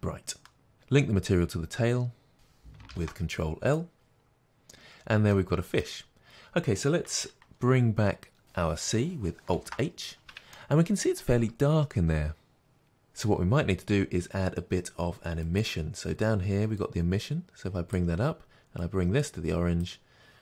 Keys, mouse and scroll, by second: 2.3 shift+click, 3.8 ctrl+l, 4.6-4.9 scroll down 1, 5.4-16.8 middle drag, 6.2-9.6 scroll down 2, 9.6 alt+h, 16.8 click.